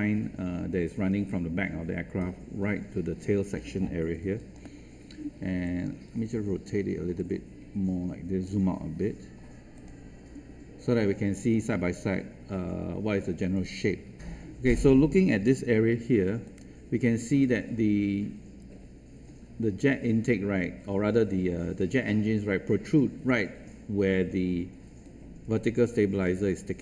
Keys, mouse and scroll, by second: 5.6-6.6 alt+drag, 7.1 alt+right click, 9.7 click, 15.9 ctrl+1, 16.4-26.6 drag.